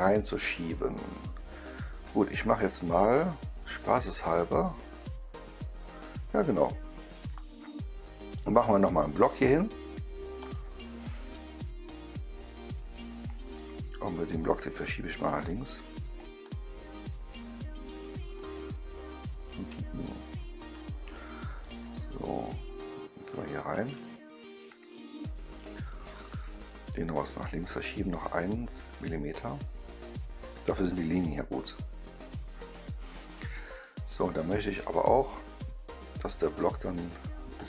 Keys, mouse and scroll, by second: 8.4 click, 10.3 click, 11.8-13.5 right drag, 14.2 click, 15.3 click, 16.3-18.2 drag, 20.7 click, 21.5 right click, 22.8 ctrl+middle click, 23.2 ctrl+middle click, 23.6 ctrl+middle click, 24.2 middle click, 24.8 middle click, 25.5 middle click, 26.4 click, 27.5 click, 28.9-30.0 drag, 32.7-35.5 right drag, 36.9-37.6 drag.